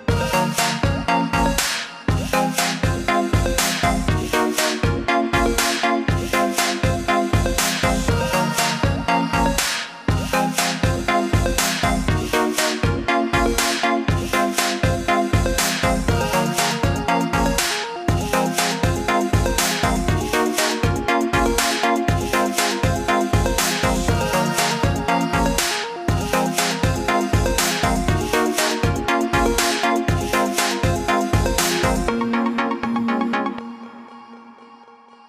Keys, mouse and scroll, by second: 8.2 3, 9.9 click, 17.1 shift+click, 18.7 click, 23.1 shift+click, 24.9 click, 29.5 shift+click, 32.6 click.